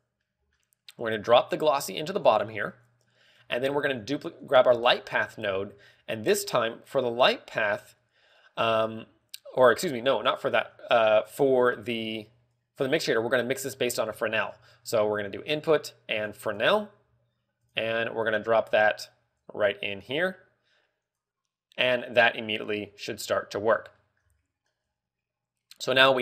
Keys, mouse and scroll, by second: 0.5 click, 0.7 middle click, 1.9 click, 3.4 click, 4.0-4.4 scroll down 4, 4.2 middle click, 4.9 click, 5.2 scroll up 2, 5.5 middle click, 6.0 scroll up 2, 6.8 middle click, 6.8 scroll up 1, 8.2-8.6 scroll down 4, 8.8 middle click, 10.3 middle click, 10.6-11.9 scroll up 4, 11.0 middle click, 13.0 click, 14.8 shift+a, 17.1 g, 18.2 click, 24.1-24.7 scroll down 5, 24.5 middle click, 25.4 click, 25.9 click.